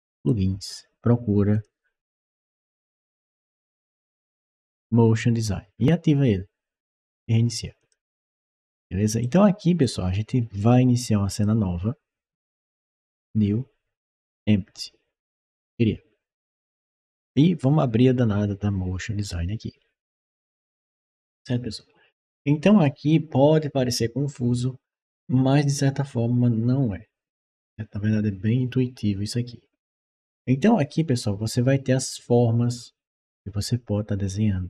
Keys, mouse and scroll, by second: 0.0 click, 1.4 click, 2.3-3.5 typing, 7.6 click, 9.0 right click, 11.2 click, 12.8 click, 14.0 click, 15.4 click, 19.0 click.